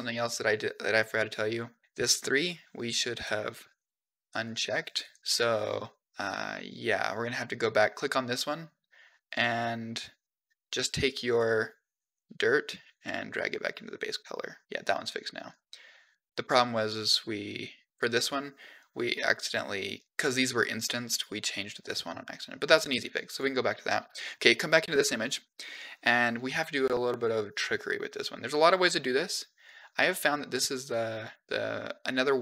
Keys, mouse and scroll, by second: 3.0 click, 3.8 g, 4.3 click, 4.6 g, 6.4 click, 7.3 click, 11.2 click, 12.0 click, 12.8-13.8 drag, 14.7 click, 15.0 click, 15.3 click, 16.5-17.9 drag, 19.0 click, 20.6 drag, 21.0 click, 21.4 click, 21.9 click, 22.2 click, 25.3-26.0 drag, 32.1-32.4 drag.